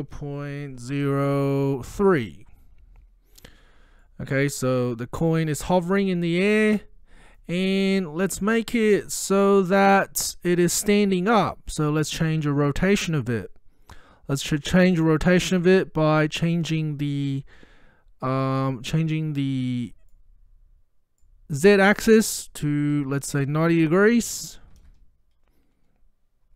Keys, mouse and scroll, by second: 0.6-2.4 typing, 4.1-5.3 middle drag, 7.7 scroll down 1, 19.6-20.3 drag.